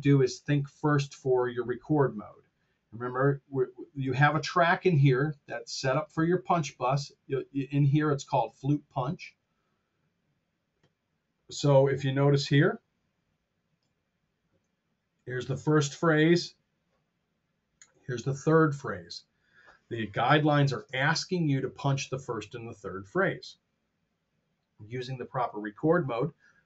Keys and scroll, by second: 20.3 Tab.